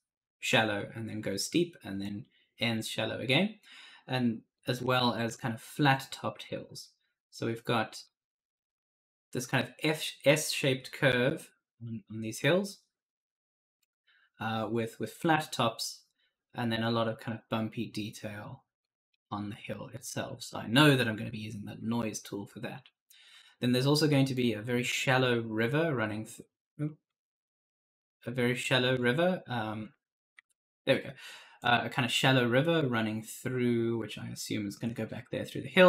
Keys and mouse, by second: 1.9 click, 4.4 click, 6.3 click, 16.9 click, 18.7 click, 20.1 click, 24.2 click, 26.9 click, 30.3 ctrl+z, 30.7 click, 31.4 click.